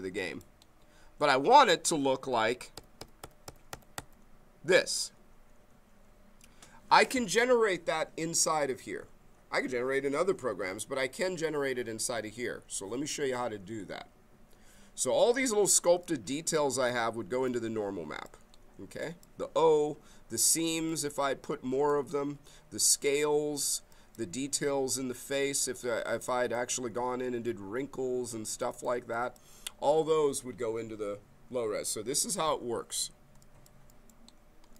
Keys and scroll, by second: 2.7 Page_Up, 5.5 Page_Up.